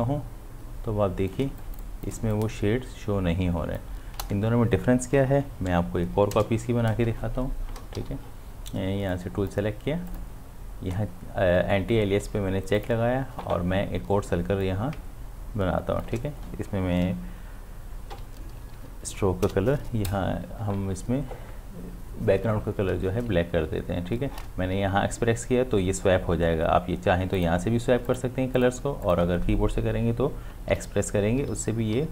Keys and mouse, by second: 1.4 ctrl+space, 1.6 click, 1.9 space, 2.3-6.8 ctrl+drag, 7.8 ctrl+click, 8.0 ctrl+d, 9.1 click, 12.8-18.2 drag, 18.2 x, 23.3 ctrl+space, 27.3 click, 30.7-31.9 typing.